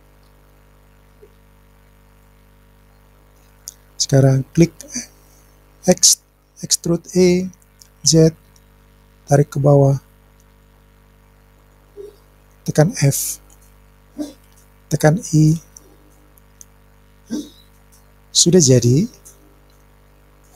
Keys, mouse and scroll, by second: 0.8-1.3 scroll down 1, 2.2-3.5 drag, 2.2-2.9 scroll down 2, 5.9 e, 8.1 z, 11.6 click, 13.5 f, 15.6 i, 17.6 click.